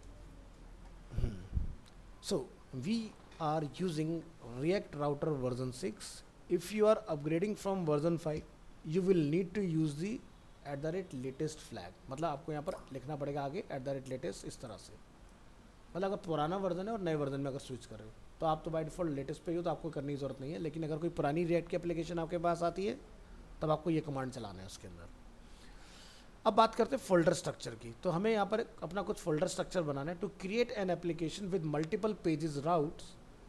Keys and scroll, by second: 0.2 alt+Tab.